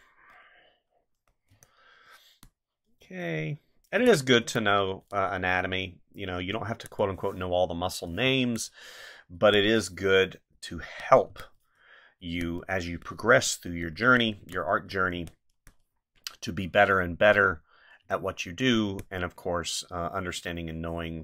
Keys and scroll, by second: 1.5 space, 3.9 space, 6.7 space, 8.2 space, 11.3 space, 14.4 space, 18.0 space.